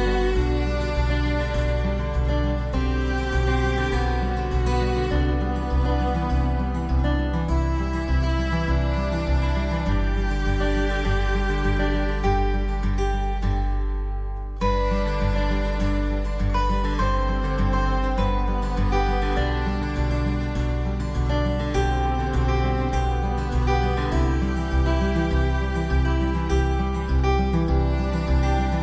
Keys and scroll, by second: 23.2 alt+space.